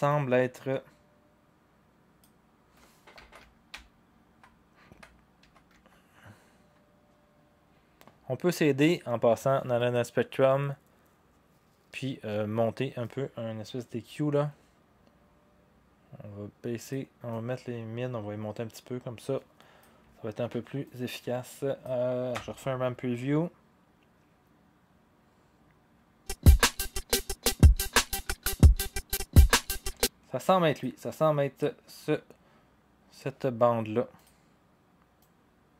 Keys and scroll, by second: 3.1 Page_Up, 3.4 Page_Up, 3.6 Page_Up, 3.7-4.4 Page_Down, 4.9 Page_Down, 5.4 Page_Up, 5.7 Page_Up, 22.4 0, 29.8 0.